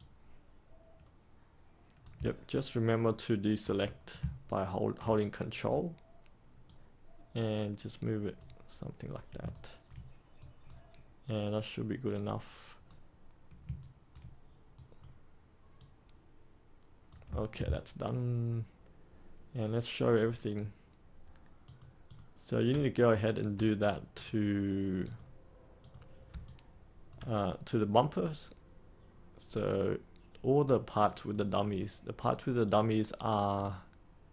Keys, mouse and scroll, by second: 0.9-2.1 drag, 2.4 ctrl+right click, 4.4 ctrl+right click, 6.6-9.0 drag, 9.4 ctrl+right click, 10.3 right click, 12.0-13.1 drag, 13.7 ctrl+right click, 14.7 right click, 15.7-21.1 drag, 22.9 alt+click, 24.1 click, 26.3 alt+click, 31.0 click.